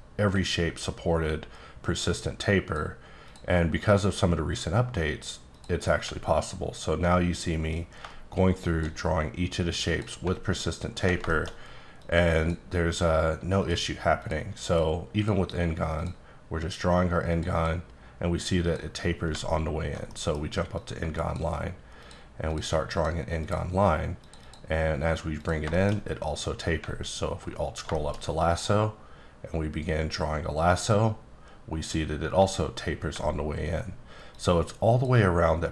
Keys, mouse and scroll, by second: 0.7-1.3 alt+scroll up 1, 1.3-2.0 scroll up 1, 2.0 click, 3.2 click, 5.5 click, 6.3-7.1 alt+scroll up 1, 7.1-7.7 scroll up 1, 7.7 click, 9.9 click, 10.6-11.1 alt+scroll up 1, 11.1 scroll up 1, 11.3 middle click, 12.0 click, 13.6 click, 14.2 click, 14.7 click, 15.2 click, 16.0 click, 17.3 click, 17.5 double click, 18.6 click, 19.6-20.1 alt+scroll up 2, 20.1 middle click, 20.7 click, 22.0 click, 22.4 click, 22.9 click, 23.4 click, 24.2 click, 24.4 double click, 25.4 click, 25.7 shift+middle click, 27.0-27.6 alt+scroll up 1, 27.6-27.9 scroll up 2, 27.9 shift+middle click, 28.5-31.0 drag, 31.8 click, 33.3-34.0 alt+scroll up 2, 34.3 click.